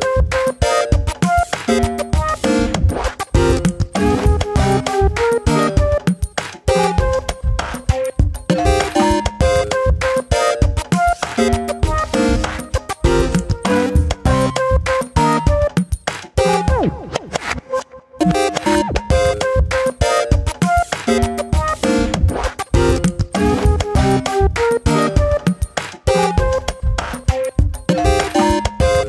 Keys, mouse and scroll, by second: 0.2 ctrl+z, 0.4 middle click, 1.3 3, 1.7 middle click, 2.0 click, 2.5 shift+click, 2.8 shift+click, 3.3 middle click, 3.9-5.0 scroll up 1, 5.0 p, 6.6 Tab, 6.9 click, 8.5 Tab, 8.9-10.3 middle drag, 10.3 `, 11.3-12.0 scroll up 2, 11.5 shift+middle click, 12.0 ctrl+r, 14.1 middle click, 14.8 3, 15.0 click, 15.3 shift+click, 15.8 middle click, 16.1 e, 17.4 ctrl+b, 19.1 middle click, 19.2 g, 20.2 Tab, 20.4 middle click, 20.6 Tab, 20.8-21.2 scroll down 3, 21.2 middle click, 21.5-22.8 scroll up 1, 23.1 `, 24.0-24.8 scroll up 1, 24.8 3, 25.0 click, 26.5 2, 26.8 ctrl+r, 28.9 middle click.